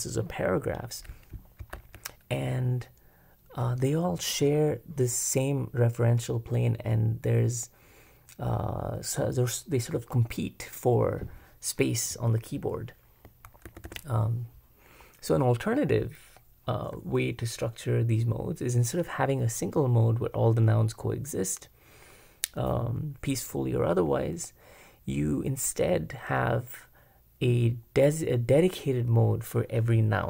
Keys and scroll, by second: 1.4-2.2 typing, 13.6 super+b, 13.9 super+b.